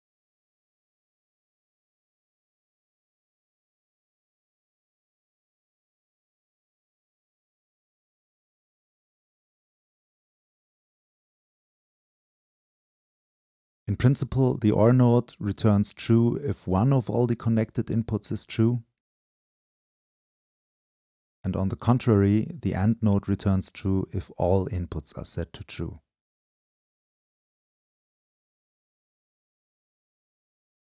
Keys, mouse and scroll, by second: 1.9-2.7 scroll up 2, 2.7-3.9 drag, 3.4-3.9 scroll up 2, 4.6-5.9 drag, 4.6-5.3 scroll up 2, 6.4-7.3 drag, 6.4-6.9 scroll up 2, 8.0-9.0 drag, 8.0-9.0 scroll up 2, 9.0-9.6 scroll up 1, 9.6 click, 10.2-10.5 scroll up 2, 10.5-11.4 middle drag, 11.4-12.0 scroll up 2, 12.0 scroll up 1, 12.0-13.1 drag, 13.1-13.5 scroll up 2, 13.5 click, 13.8-14.6 right drag, 14.6-19.3 drag.